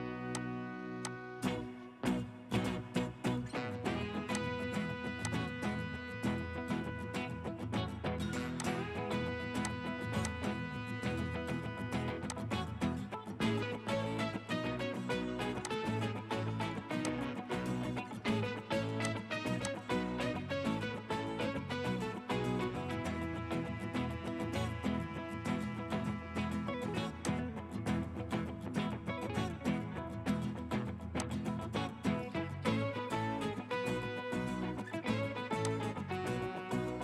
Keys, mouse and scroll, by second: 2.9 typing, 7.0 Escape, 11.0-11.3 typing, 11.6 Return, 13.0 scroll down 1, 14.0 Escape, 20.5-22.6 scroll up 1, 32.5-34.5 scroll down 1.